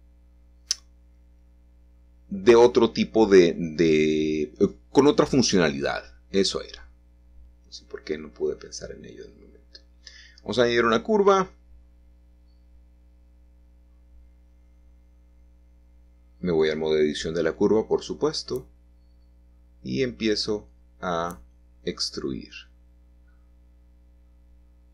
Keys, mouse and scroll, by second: 0.0 Escape, 0.7 Tab, 1.7 shift+a, 5.1 middle click, 5.2 click, 8.1 r, 8.4 y, 8.8 9, 9.2 0, 9.3 Return, 11.4-12.0 scroll down 3, 12.0-13.1 shift+middle drag, 12.8-13.6 scroll up 2, 14.5 click, 15.5 3, 17.7 e, 19.5-21.0 drag, 19.8 e, 21.5-22.7 drag, 21.5 e, 23.6-24.9 drag, 23.7 e.